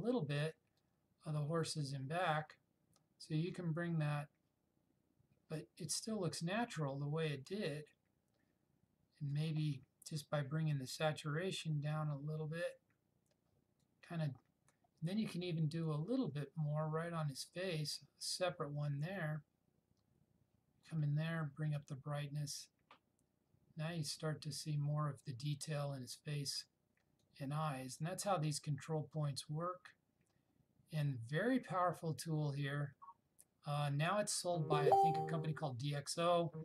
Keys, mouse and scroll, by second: 0.9-9.6 drag, 11.4-14.2 drag.